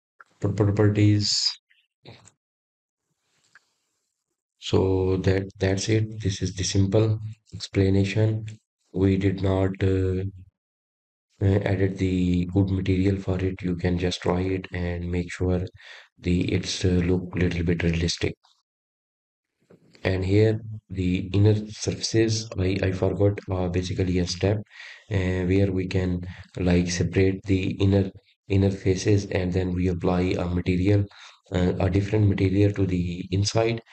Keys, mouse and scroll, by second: 2.5-3.2 scroll down 4, 3.6-4.1 scroll up 3, 4.1-6.6 scroll down 1, 6.6-7.3 scroll up 9, 7.3-7.9 scroll up 1, 7.9 click, 25.3-26.3 scroll up 6.